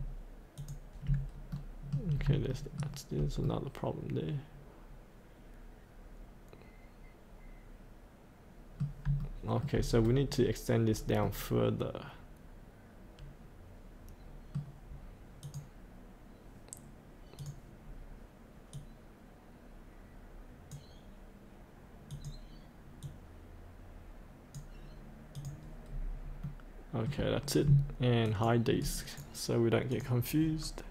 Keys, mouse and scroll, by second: 0.5 ctrl+click, 1.3 scroll up 1, 1.5 middle click, 2.1 scroll up 1, 2.5 shift+middle click, 5.7-9.1 middle drag, 9.2 shift+middle click, 10.0 scroll down 1, 10.9-11.2 scroll up 1, 11.2 middle click, 15.4-20.8 drag, 20.9 click, 23.0-24.9 drag, 25.9 scroll up 1, 26.4 middle click, 28.2 ctrl+click, 28.8 right click, 29.9 click, 30.4-30.9 scroll up 1.